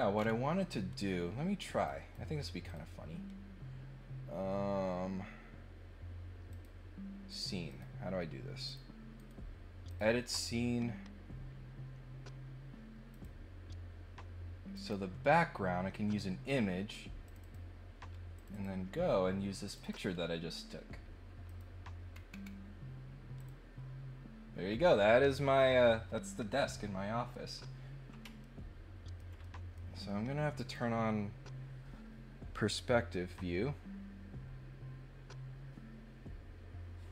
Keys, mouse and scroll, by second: 0.1 scroll up 1, 1.8 click, 2.7 click, 6.5 click, 7.3 click, 7.7 click, 8.6 click, 9.2 right click, 9.8 click, 13.1 click, 14.7 click, 17.2 click, 17.4 click, 18.3 click, 18.5 click, 19.6 click, 21.4 click, 22.1-22.4 scroll down 3, 23.3 click, 26.2-27.3 middle drag, 28.4 ctrl+middle click, 29.4 middle click, 30.5 click.